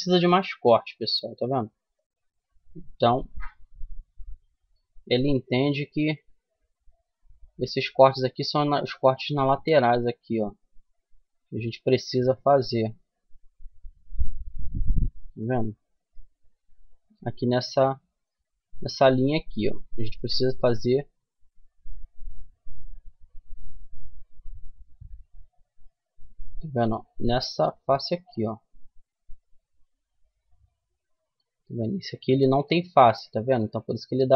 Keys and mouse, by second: 3.1 ctrl+n, 4.2 Tab, 4.6-6.5 middle drag, 6.8 Tab, 8.4 middle click, 10.3 middle click, 11.8-13.9 middle drag, 15.8-20.0 middle drag, 20.0 Tab, 20.6 Tab, 21.0-23.7 middle drag, 22.5 a, 23.7 click, 23.8 middle click, 26.0-28.4 right drag, 28.4-33.0 middle drag, 34.2 f.